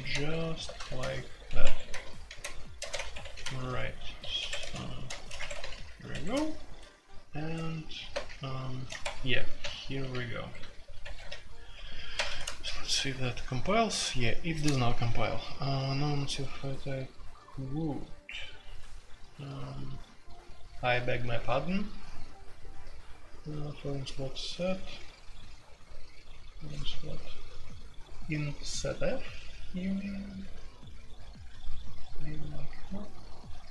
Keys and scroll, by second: 0.0-5.7 typing, 3.4 Tab, 4.4 Escape, 5.3 Escape, 6.1 Escape, 7.6-12.8 typing, 9.0 Escape.